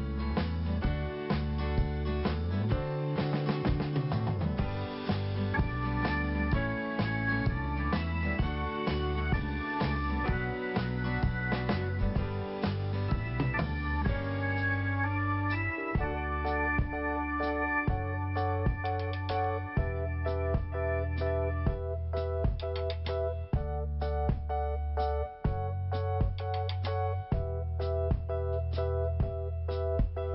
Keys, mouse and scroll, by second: 1.9 scroll down 1, 2.6 scroll up 1, 4.9 t, 5.4 scroll down 1, 6.4-7.9 scroll up 1, 8.5 click, 10.3 click, 10.5 click, 16.4-17.2 scroll down 1, 17.2 click, 18.0 scroll down 1, 19.0-19.5 scroll up 1, 19.5 middle click, 20.4 scroll up 1, 21.0 middle click, 22.3 click, 24.7 t, 25.6-27.7 scroll up 2, 29.0 click.